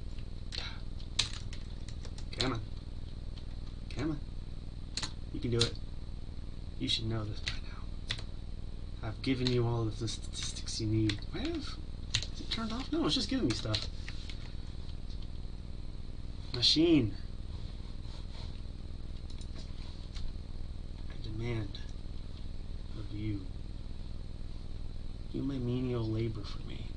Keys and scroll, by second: 3.9 Delete, 8.1 Tab, 12.6 ctrl+s.